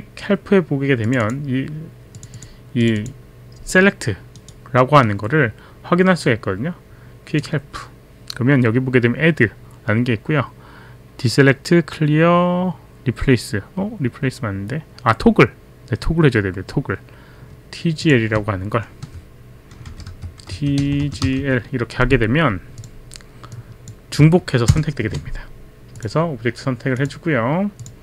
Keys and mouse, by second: 1.1 click, 2.2 click, 2.8 click, 4.4 right click, 5.0 right click, 18.0 click, 19.0 Right, 19.9-21.9 typing, 22.7 click, 23.5 click, 24.7 ctrl+Return, 25.9 click, 27.0 click, 27.8 click.